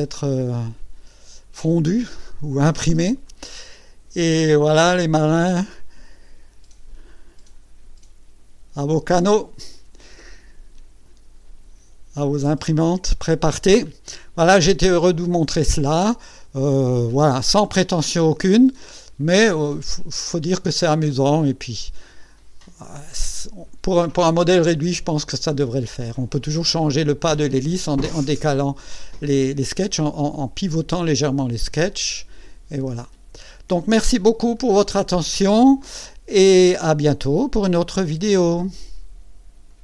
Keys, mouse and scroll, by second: 2.0 right click, 3.3 click, 5.7 right click, 7.0-10.0 drag, 10.4 scroll up 1, 11.0 scroll down 1, 26.4-27.6 drag, 31.9-34.3 drag, 34.6 right click.